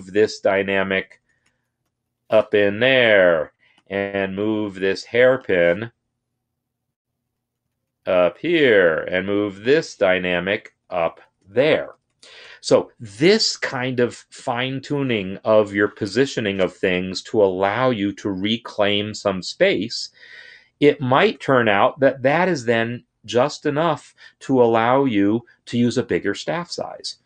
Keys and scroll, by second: 0.1 Up, 0.5 Up, 0.7 Up, 0.8 Up, 1.5 Left, 8.6 Up.